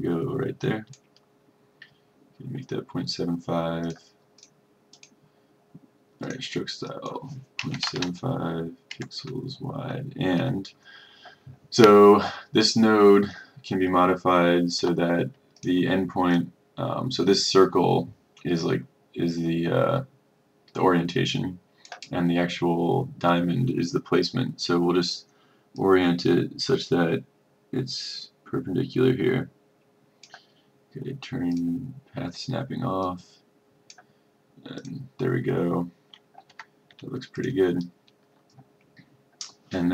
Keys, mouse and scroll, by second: 7.9 KP_7, 9.8 KP_5, 14.9 F2, 15.7-34.6 drag, 36.6 F1, 37.5 click.